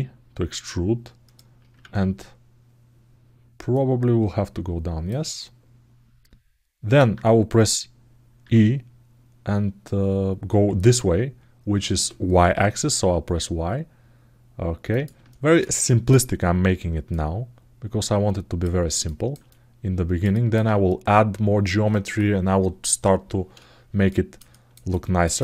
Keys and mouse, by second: 1.6 ctrl+z, 3.5-4.9 drag, 5.0-6.7 middle drag, 15.0 alt+shift+middle click, 15.5 ctrl+alt+middle click, 16.9-18.4 drag, 18.8 alt+shift+middle click, 19.2 alt+middle click, 20.1 alt+shift+middle click, 23.8 alt+middle click, 24.3 alt+shift+middle click, 24.7 alt+middle click.